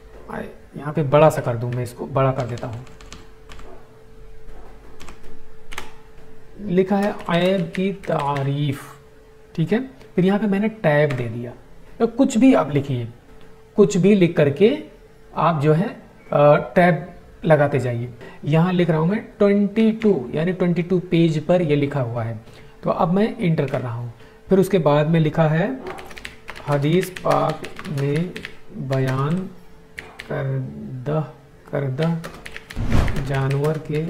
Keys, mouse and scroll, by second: 0.0-0.1 typing, 1.2 ctrl+a, 2.3 ctrl+F10, 5.1 End, 6.6-8.6 typing, 11.0 typing, 19.7 typing, 23.6 Return, 25.7-30.4 typing, 31.6-34.0 typing.